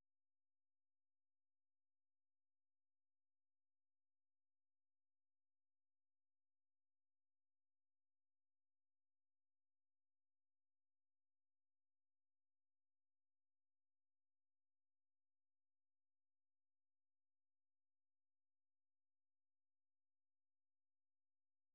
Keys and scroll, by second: 0.7 ctrl+a, 2.5 ctrl+v, 2.9 Return, 6.9-8.0 typing, 20.0 super+1, 21.4 Up, 21.6 Up.